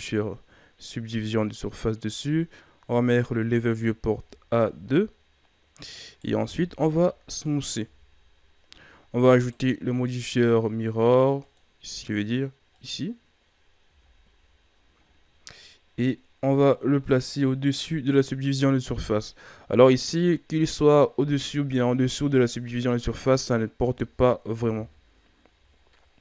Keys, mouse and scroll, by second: 1.2-2.8 drag, 3.4-4.1 drag, 4.1 a, 5.9 right click, 6.4 w, 7.8 a, 8.1 scroll down 2, 8.7-9.3 scroll up 3, 9.3 right click, 10.9-11.4 drag, 12.8-13.6 drag, 13.6-15.0 scroll down 4, 13.8 a, 15.0-15.7 scroll up 2, 16.6-17.8 drag, 24.7 KP_3, 25.8 ctrl+scroll down 2, 26.1 scroll up 1.